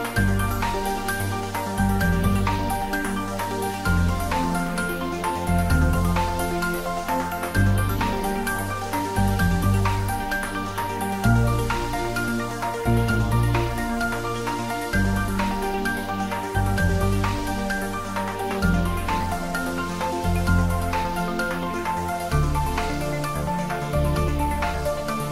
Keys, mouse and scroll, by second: 0.3 Tab, 0.6 click, 3.7 Tab, 4.4 click, 4.6 Tab, 5.3 click, 7.7 Tab, 8.4 click, 8.7 ctrl+s, 9.0 click, 12.2 click, 13.1-14.0 typing, 14.7 click, 15.1-16.0 typing, 16.9 click, 17.2 ctrl+s, 17.3 click, 18.5-19.4 typing, 20.0 click, 20.3 ctrl+s, 20.5 click, 20.8 ctrl+s, 21.7 click, 22.0 Tab, 22.4 click, 23.7 click, 24.5 Tab.